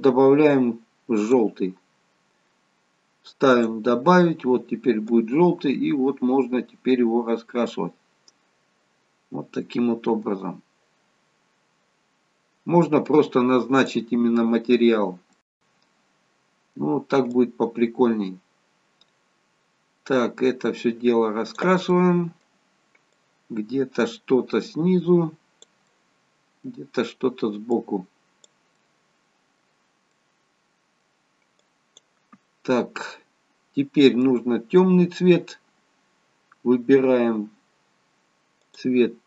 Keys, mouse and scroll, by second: 15.5 middle click, 17.3 click, 21.9 middle click, 23.0 click, 25.8 middle click, 26.8-27.7 scroll down 2, 27.7 click, 28.7 middle click, 30.7 middle click, 31.5 click, 32.3-32.9 scroll up 1, 32.9 middle click, 32.9-34.6 scroll up 1, 38.6 click.